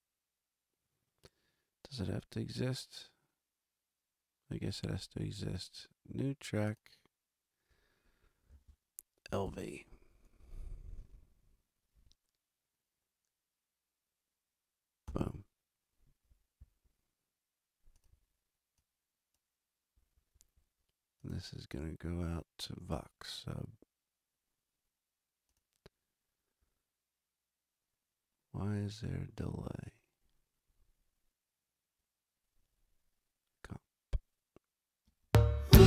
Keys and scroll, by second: 9.0-9.9 typing, 15.0 Return, 35.0 space.